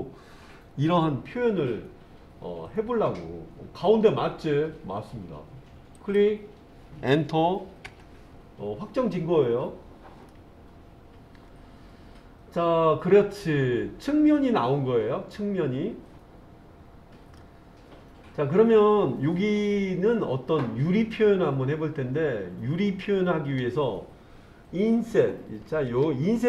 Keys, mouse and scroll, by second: 7.8 Return, 10.3-17.4 middle drag.